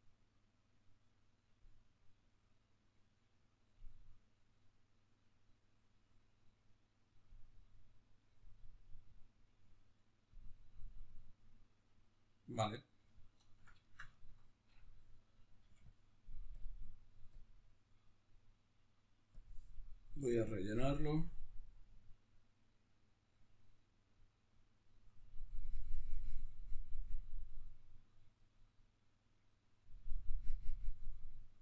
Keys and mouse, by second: 10.6-15.7 middle drag, 15.4 f, 15.7 click, 19.9-31.6 drag.